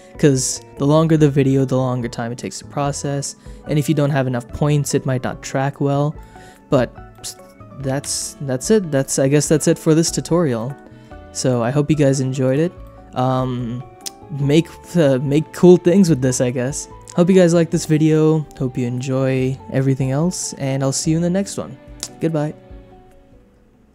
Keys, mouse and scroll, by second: 5.4 middle click, 6.2 shift+middle click, 6.5 middle click, 7.1 shift+middle click, 8.0 KP_0, 9.0 click, 10.5 shift+middle click, 11.3 shift+middle click, 12.4 click, 12.8 shift+middle click, 15.0 shift+click, 16.9 space, 19.9 click.